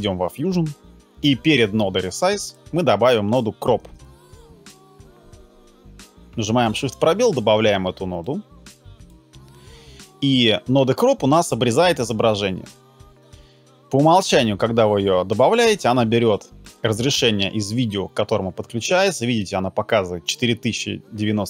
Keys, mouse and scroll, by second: 3.8 shift+space, 4.1 c.